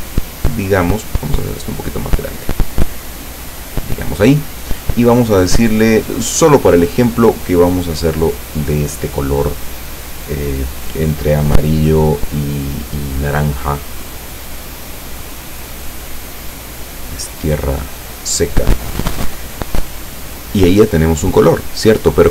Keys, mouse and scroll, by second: 2.1-4.4 drag, 5.3 click, 7.6-9.7 drag, 15.5-17.3 middle drag, 17.4 scroll down 1, 18.1 scroll up 1.